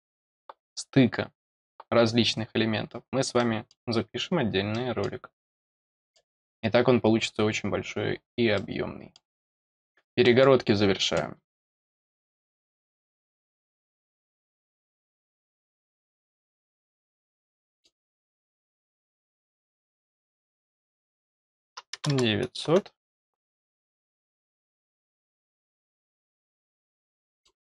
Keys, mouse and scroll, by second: 1.1 scroll down 2, 2.6 scroll down 2, 3.3 middle click, 4.7 middle click, 5.3-5.8 scroll down 2, 5.9 middle click, 6.7 scroll down 2, 8.5 middle click, 9.4 middle click, 10.2 middle click, 13.4 click, 14.4-15.5 scroll up 2, 15.5 click, 16.3 click, 17.5 middle click, 18.1 scroll down 2, 24.5 click, 26.1 click, 27.1 middle click.